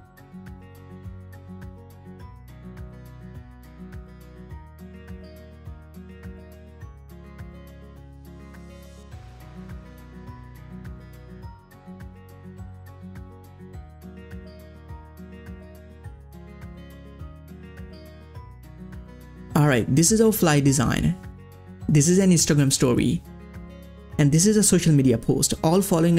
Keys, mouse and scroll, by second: 1.8 scroll down 1, 2.1-8.2 drag, 8.8-11.4 drag, 12.0 click, 12.1-15.7 drag, 16.3 click, 16.9 scroll down 1, 17.6 click, 19.2-19.9 ctrl+scroll up 2, 21.7 click, 21.8 click, 23.8 click, 23.8 click.